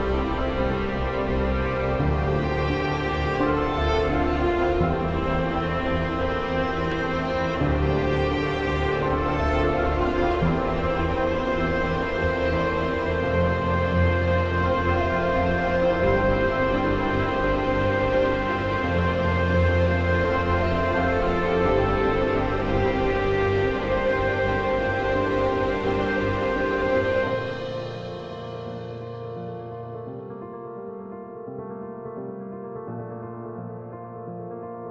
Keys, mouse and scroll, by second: 5.2 shift+F11, 7.2-9.5 drag, 11.0 ctrl+r, 11.1 F3, 15.4-16.9 ctrl+drag, 16.9 right click, 18.3 click, 21.3 click, 21.9 F2, 22.2-24.0 drag, 24.0 F4, 24.9 click, 26.0 F2, 26.2-28.1 drag, 28.5-29.3 typing.